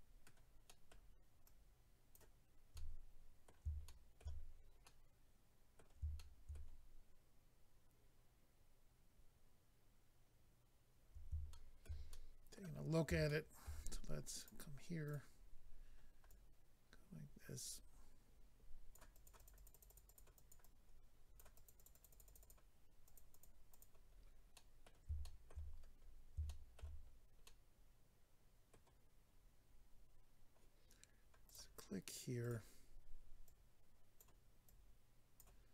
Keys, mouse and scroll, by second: 0.7 middle click, 1.4 click, 2.7 middle click, 3.8 shift+middle click, 4.4-4.7 scroll down 1, 4.8 middle click, 6.1 shift+middle click, 8.0-8.3 scroll up 1, 11.5 shift+middle click, 12.1 middle click, 12.8-13.1 scroll up 2, 13.2 shift+middle click, 13.6 middle click, 14.4 click, 14.4 click, 15.0 click, 15.1 click, 15.3-16.3 scroll up 4, 16.3 click, 19.1 click, 19.2 click, 19.3 click, 19.4 double click, 19.5 click, 19.6 click, 19.8 double click, 19.9 click, 19.9 click, 20.0 click, 20.1 double click, 20.3 click, 20.5 double click, 20.6 double click, 21.5 double click, 21.6 click, 21.7 click, 21.8 double click, 21.9 click, 22.0 click, 22.1 click, 22.2 double click, 22.2 click, 22.4 click, 22.5 double click, 23.1 double click, 23.2 double click, 23.3 double click, 23.4 double click, 23.7 double click, 23.8 double click, 24.1-24.5 scroll down 2, 24.5 middle click, 25.2 shift+middle click, 25.5 middle click, 25.7-26.5 scroll down 5, 26.5 shift+middle click, 27.1 scroll down 1, 27.4 middle click, 31.5 click, 31.5 click, 32.4 click, 32.5 click, 33.4 click, 34.7 click.